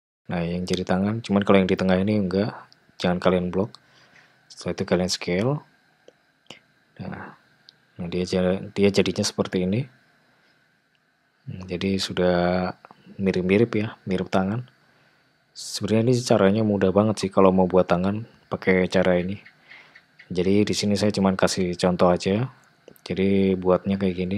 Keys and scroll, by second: 3.4 ctrl+a, 17.1 `, 20.3 g.